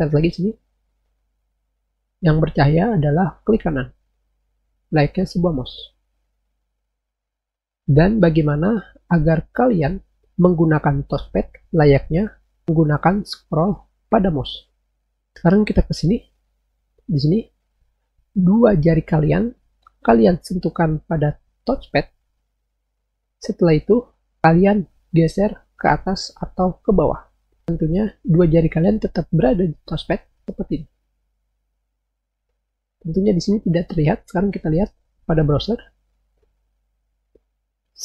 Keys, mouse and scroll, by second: 7.4 click, 15.6 click, 35.4 click.